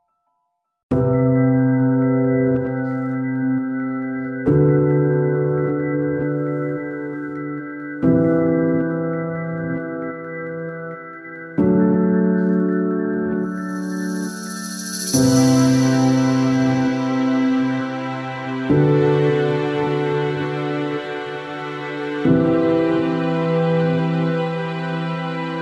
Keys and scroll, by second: 16.9-18.6 typing.